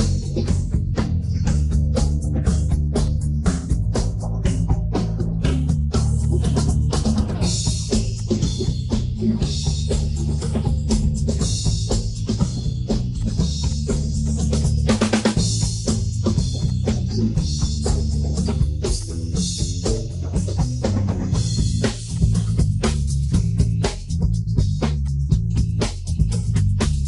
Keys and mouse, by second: 0.6-1.6 middle drag, 1.8-2.7 middle drag, 3.3 middle click, 3.9 ctrl+2, 4.1-4.7 middle drag, 5.5 middle click, 6.2 click, 7.2 click, 7.5 middle click, 8.2-8.9 drag, 9.4 ctrl+z, 14.2 click, 15.1 middle drag, 15.8 Tab, 15.9 middle click, 16.6 click, 17.9 click, 18.4 click, 18.9 click, 19.9 click, 20.1 middle click, 20.8 Tab, 21.6 ctrl+2, 25.0 click, 26.2 ctrl+2, 26.4-27.0 middle drag.